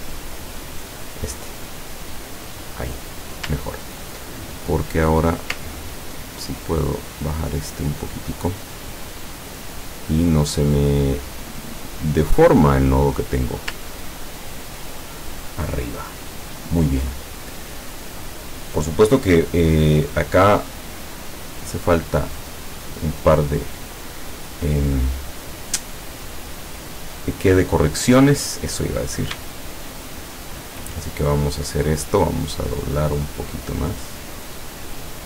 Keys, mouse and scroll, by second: 1.2 click, 2.7 click, 3.7-4.0 ctrl+scroll down 2, 4.8-5.2 scroll up 2, 5.3 scroll down 2, 5.8-6.1 ctrl+scroll up 2, 6.6-9.3 ctrl+drag, 9.5-12.6 drag, 14.0-14.6 ctrl+scroll down 4, 28.4 click, 29.7 shift+click, 30.4 shift+click, 31.2 shift+click, 32.2-35.2 drag.